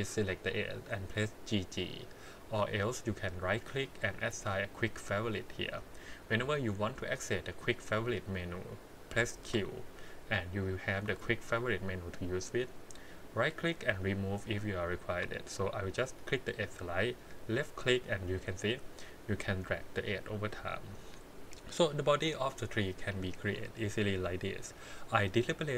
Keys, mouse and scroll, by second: 9.4 q, 15.1 q, 23.3 click, 24.6-25.7 middle drag.